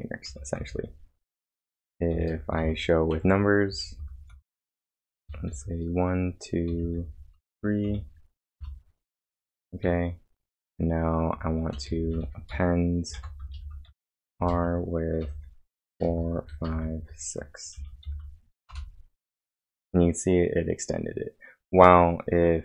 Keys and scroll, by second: 0.0-4.0 typing, 5.2-8.3 typing, 8.6 Return, 9.8 a, 11.5-18.2 typing, 18.7 Return.